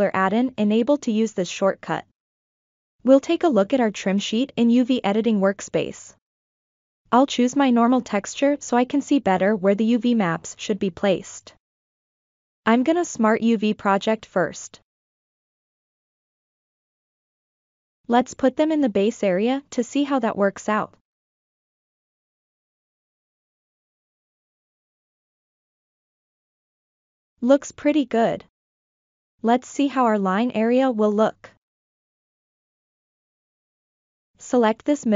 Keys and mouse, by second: 3.9 click, 5.0 shift+middle click, 5.6 middle click, 7.2-9.0 drag, 9.6 ctrl+middle click, 10.0 shift+middle click, 11.7 ctrl+middle click, 12.6 a, 13.6 u, 16.9 s, 18.8 a, 19.6 click, 19.8 click, 21.2 click, 21.2 g, 22.9 middle click, 24.5 F7, 25.0 F7, 25.4-29.1 middle drag, 29.3 F7, 31.1 ctrl+middle click, 32.4 middle click, 34.3 alt+3, 34.7 alt+click.